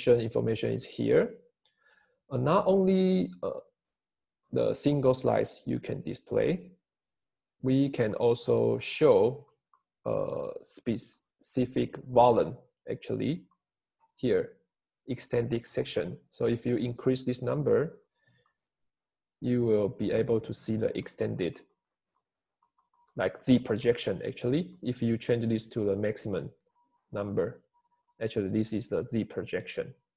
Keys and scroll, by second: 4.9 Escape, 5.8 Escape.